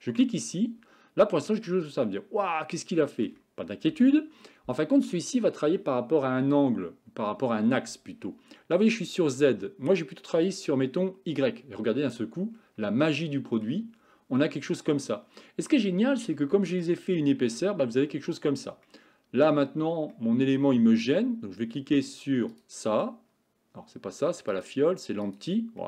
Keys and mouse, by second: 1.6-3.3 middle drag, 3.9 KP_1, 10.5 click, 13.2-13.7 middle drag, 14.4-15.0 middle drag, 16.4-16.9 shift+middle drag, 18.9-19.5 middle drag, 20.2 middle click, 22.6 click, 24.6 click, 25.3 click.